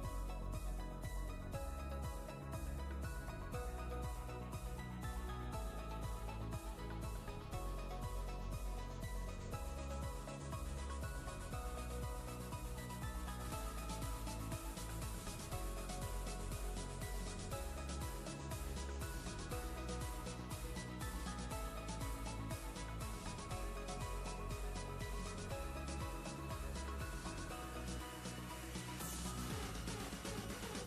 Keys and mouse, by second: 10.1 ctrl+space, 10.3-10.9 ctrl+click, 10.6 ctrl+space, 11.1 click, 11.6-12.9 ctrl+space, 13.2-16.1 space, 16.8-18.7 drag, 21.3 alt+click, 22.6 space, 23.0-23.3 click, 23.1 space, 24.6 alt+click, 26.1 click, 26.7 ctrl+space, 26.9-27.5 ctrl+click, 27.3 ctrl+space, 27.5 click, 27.8-28.2 space, 28.6 ctrl+space, 28.8 ctrl+click, 29.1-30.8 ctrl+space, 30.2 ctrl+space.